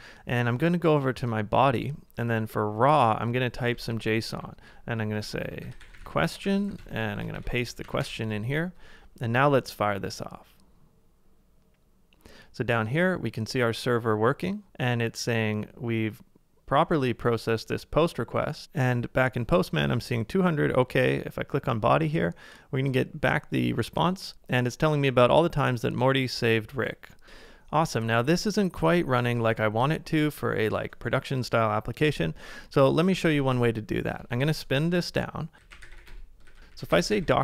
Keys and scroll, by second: 4.3-7.2 typing, 7.3 super+v, 9.3-10.1 typing, 27.2 super+Tab, 33.2 ctrl+a, 33.3-37.4 typing, 36.5 ctrl+a.